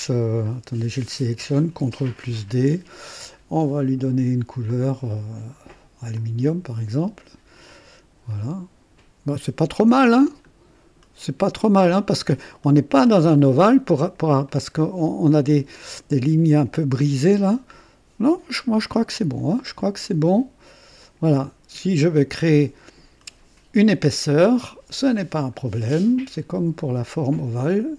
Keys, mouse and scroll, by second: 0.4 click, 1.7 ctrl+d, 4.6 click, 6.1 click, 7.7 click, 8.3-12.3 drag, 12.5-14.3 drag, 14.5-16.2 drag, 17.4-18.8 drag, 18.9-20.0 drag, 20.2 click, 21.0 click, 22.0-24.2 drag, 25.3 click.